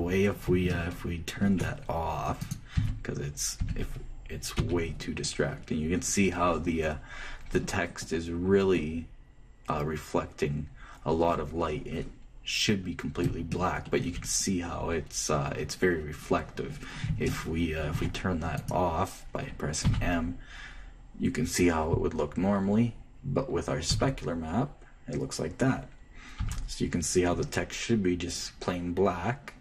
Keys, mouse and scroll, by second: 3.2 shift+right click, 3.5 h, 4.3 h, 5.5 m, 6.5-7.8 middle drag, 7.9 middle click, 12.1-17.2 middle drag, 18.0-19.3 shift+middle drag, 19.3-21.0 shift+drag, 20.6 shift+m, 24.7 m, 27.2 m.